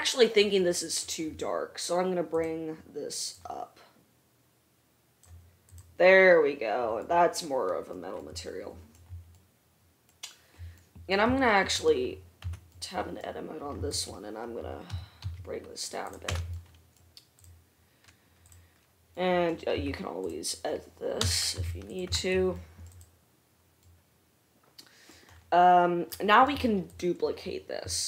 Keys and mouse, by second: 0.2-2.5 right drag, 2.5 middle click, 2.7-12.0 right drag, 12.0 middle click, 12.1 right click, 12.6 Tab, 13.0 click, 14.0 3, 15.2 g, 16.6 Tab, 18.7 middle click, 20.0 Tab, 21.5 g, 22.2-28.0 drag, 22.3 Tab, 23.1 middle click, 23.1 right click, 27.2 middle click, 27.2 right click.